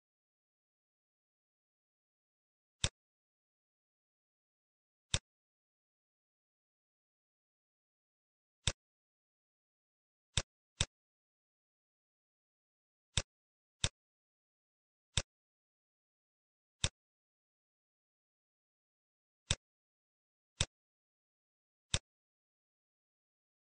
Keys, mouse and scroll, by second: 2.8 click, 8.6 click, 9.5 shift+d, 10.7 click, 15.2 click, 16.9 click, 18.7 shift+d, 20.5 click.